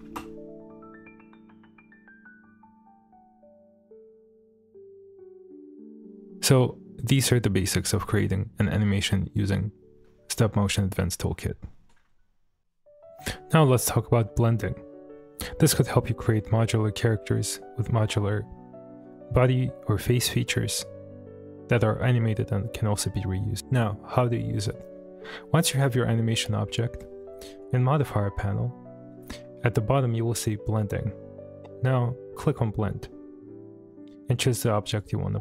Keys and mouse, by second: 0.0 space, 5.2 space, 5.5-6.0 middle drag, 13.9-14.6 middle drag, 23.6 middle click, 25.2-26.8 middle drag, 32.5 click, 34.9 click.